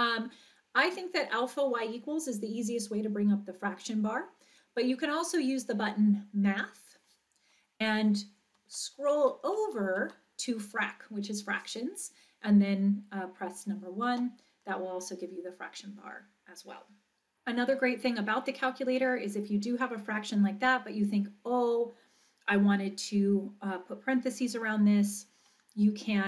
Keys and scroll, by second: 8.7 Right, 9.2 Right, 9.6 Right, 10.2 Right, 14.1 Return.